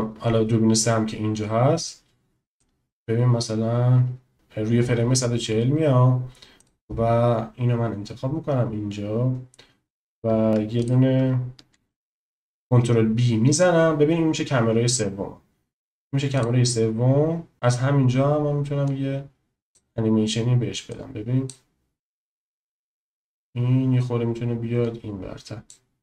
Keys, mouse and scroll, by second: 2.7-4.4 drag, 6.5 click, 10.8 click, 12.0 ctrl+b, 18.8 click, 21.0-21.7 drag, 22.9 click.